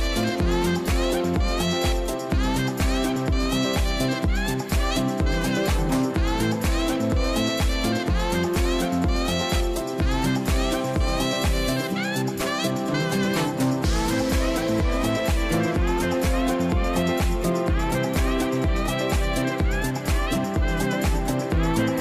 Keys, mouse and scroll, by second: 10.2 scroll up 1.